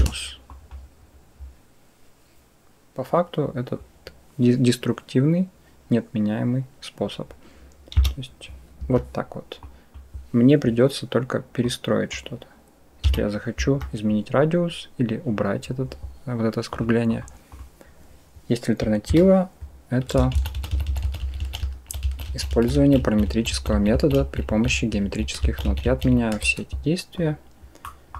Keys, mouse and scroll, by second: 0.5 click, 7.8 s, 9.6 click, 11.5 click, 12.9 s, 16.6 click, 17.4 click, 18.9 Delete, 20.2 ctrl+z, 20.4 ctrl+z, 20.6 ctrl+z, 20.7 ctrl+z, 20.9 ctrl+z, 21.1 ctrl+z, 21.3 ctrl+z, 21.5 ctrl+z, 21.9 ctrl+z, 22.1 ctrl+z, 22.4 ctrl+z, 23.1 ctrl+z, 23.4 ctrl+z, 23.8 ctrl+z, 24.0 ctrl+z, 24.6 ctrl+z, 24.9 ctrl+z, 25.7 ctrl+z, 26.0 ctrl+z, 27.7 click.